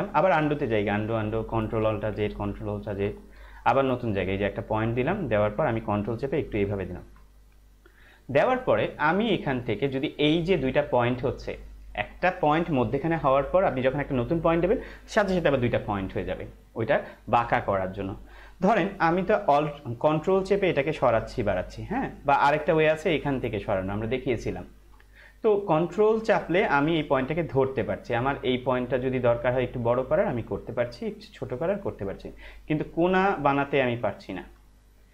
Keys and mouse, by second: 0.3 ctrl+z, 1.6 ctrl+alt+z, 6.0 ctrl+click, 20.9 ctrl+click, 26.2 ctrl+click, 29.6 ctrl+click.